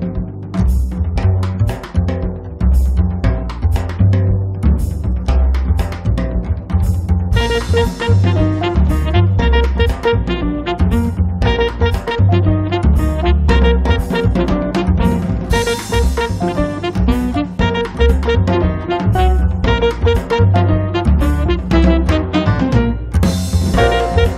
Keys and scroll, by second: 15.9 space, 19.1 1, 19.4 0, 20.0 space, 22.9 Escape.